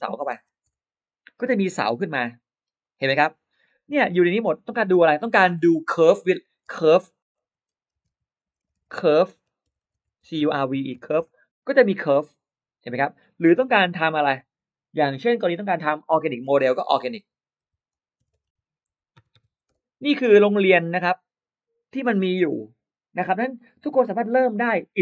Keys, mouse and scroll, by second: 0.0-1.1 typing, 2.4 middle click, 2.4-3.0 scroll down 1, 3.4 middle click, 3.4-3.7 scroll down 1, 4.6 BackSpace, 4.9 BackSpace, 5.3 BackSpace, 6.6-11.3 typing, 13.5 BackSpace, 13.7 BackSpace, 13.9 BackSpace, 14.1 BackSpace, 16.7-20.4 typing, 20.6 Return.